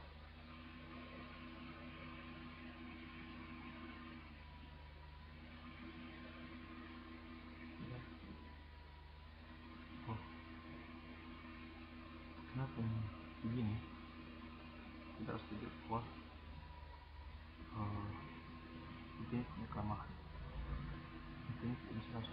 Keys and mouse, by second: 9.1-10.2 drag, 10.4-11.2 drag, 15.8-17.7 drag, 17.7 middle click, 19.6 right click, 20.3 right click, 20.7-21.6 drag.